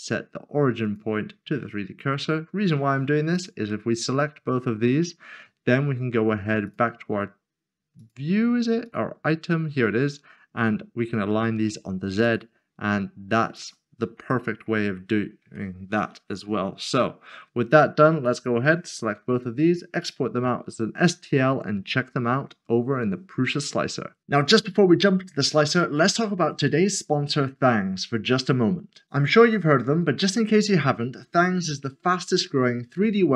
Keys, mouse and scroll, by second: 0.8 click, 3.3 shift+click, 6.6 shift+click, 8.8 click, 12.2 click, 14.3 middle click, 14.9-15.4 scroll down 1, 15.7 middle click, 17.9 s.